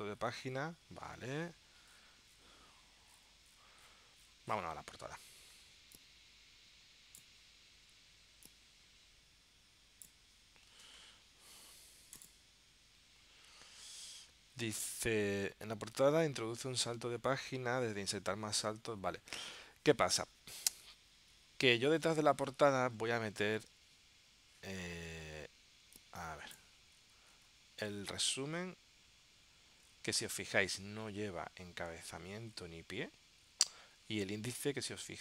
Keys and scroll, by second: 23.1 super+Tab.